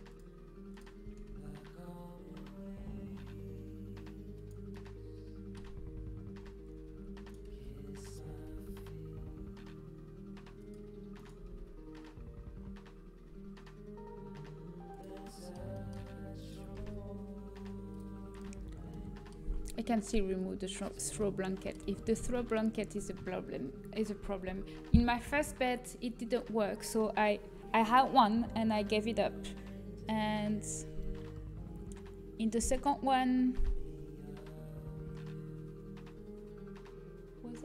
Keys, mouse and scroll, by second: 0.0 click, 1.0 s, 4.7 middle click, 6.9 z, 7.4 z, 8.2 g, 11.3 g, 15.2 middle click, 16.3 middle click, 16.6 g, 17.5 click, 20.4 a, 26.1-29.4 middle drag.